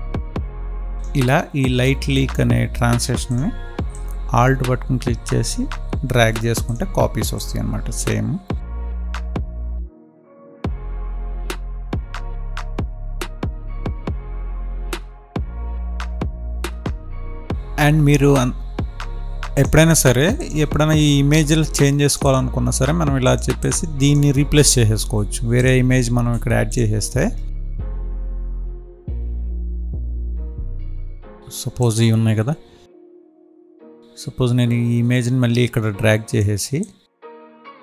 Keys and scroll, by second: 10.5 ctrl+s, 14.7 ctrl+s.